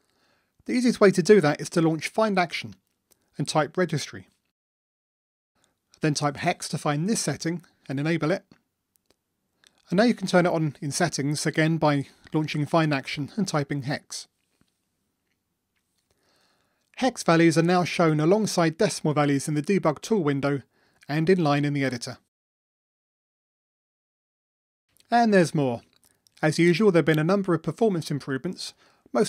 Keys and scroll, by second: 3.4 ctrl+shift+super+a, 11.4 ctrl+shift+super+a, 18.1 ctrl+d.